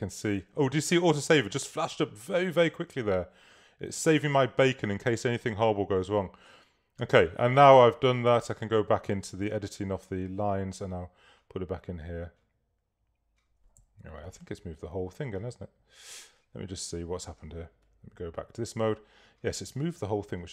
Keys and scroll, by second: 14.0 v.